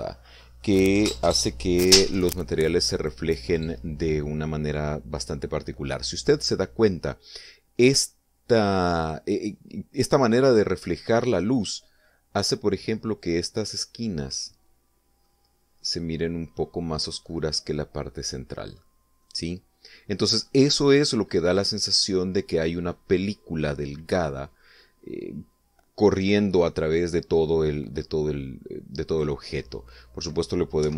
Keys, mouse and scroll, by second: 13.7-15.8 middle drag, 18.5 middle click, 19.6 middle click, 20.9 middle click, 22.1-23.7 middle drag, 29.5 click.